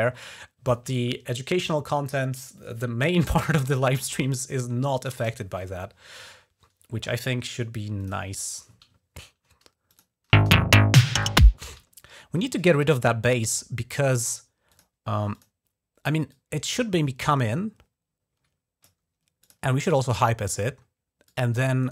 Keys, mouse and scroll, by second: 7.8 click, 9.0 ctrl+scroll up 1, 9.7 click, 10.2 space, 11.4 space, 11.8-12.2 ctrl+scroll down 2, 12.6 ctrl+scroll up 1, 13.0-13.4 ctrl+scroll down 1, 14.5 click, 15.2 click, 16.1-19.8 drag, 21.1 click, 21.7 right click.